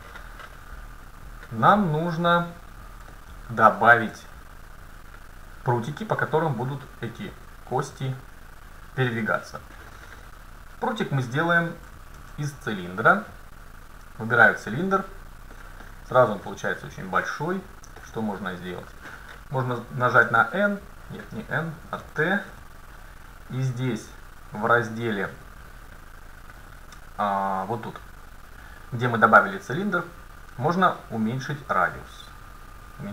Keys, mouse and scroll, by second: 3.2 middle click, 3.8-4.5 scroll down 1, 4.5-6.1 middle drag, 12.3 shift+a, 15.6 middle click, 18.0-19.9 middle drag, 20.3 n, 22.1 n, 22.5 t, 25.6 t, 25.9 middle click, 26.1 middle click, 31.6-33.1 drag.